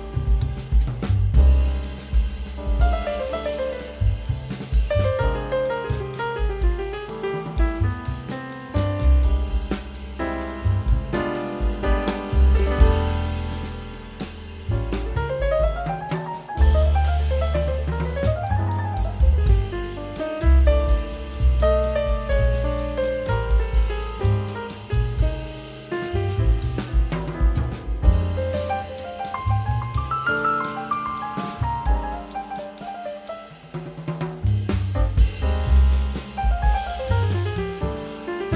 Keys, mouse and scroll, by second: 2.0 scroll up 1, 3.1 ctrl+k, 5.4 double click, 6.3 space, 7.4 Caps_Lock, 8.0-9.1 typing, 16.3-17.0 typing, 23.7 shift+click, 23.9 typing, 27.8 scroll down 1, 28.8 scroll up 1, 29.0-30.9 scroll down 1.